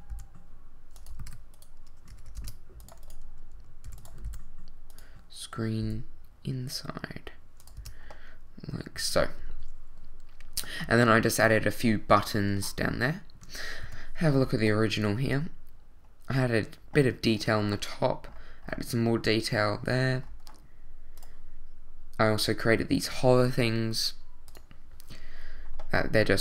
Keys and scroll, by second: 0.1 e, 1.1 super+e, 1.2 super+z, 2.1 ctrl+super+z, 2.4 ctrl+Tab, 3.8 e, 4.2 s, 5.8 e, 7.8 Tab, 13.8 i.